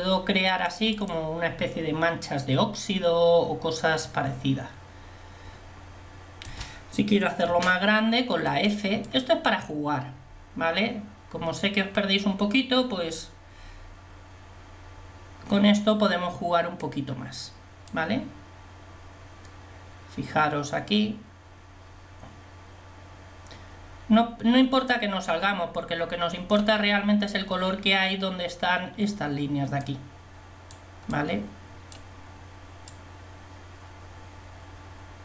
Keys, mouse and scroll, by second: 8.5 f, 18.0-19.9 drag, 30.1-35.2 drag.